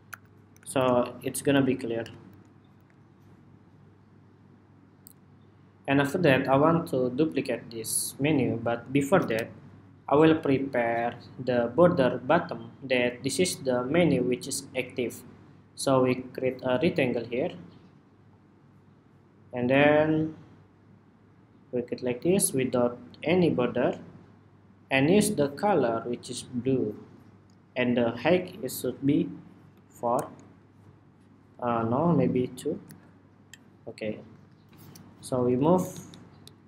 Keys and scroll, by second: 0.3 super+=, 0.5 super+-, 1.0 super+-, 1.3 super+-, 1.7 super+-, 2.0 super+-, 2.5 super+-, 9.0 super+=, 10.3 super+=, 35.6 alt+Down, 35.8 alt+Down, 36.2 alt+Down.